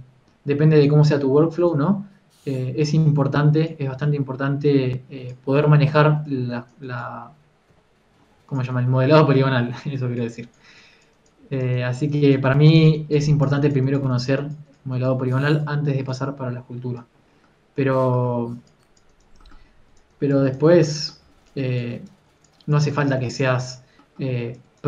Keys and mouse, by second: 0.3 KP_1, 1.0 f, 2.1 f, 3.5 KP_3, 3.9 f, 6.5 f, 8.4 KP_3, 9.0 f, 11.0 f, 12.0 f, 13.2 f, 16.5 f, 19.1 f, 19.3-21.4 drag, 20.3 f, 21.8 f.